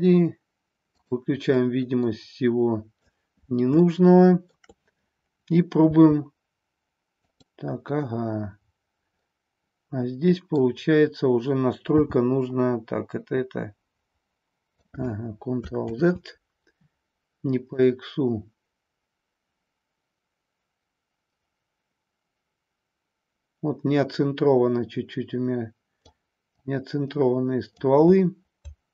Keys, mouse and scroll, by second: 0.9 click, 1.5-3.0 middle drag, 3.8-4.5 shift+middle drag, 5.8 r, 7.2 click, 9.2-10.5 middle drag, 11.8 n, 13.5-14.9 drag, 15.9 ctrl+z, 17.7-26.0 drag, 26.4-27.8 drag.